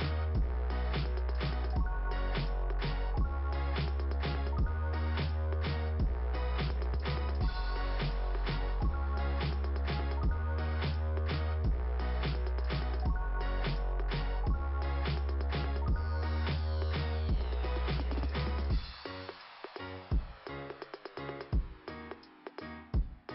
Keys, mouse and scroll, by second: 7.0 click, 8.7 click, 12.5 scroll down 2, 17.8 click, 19.1 click.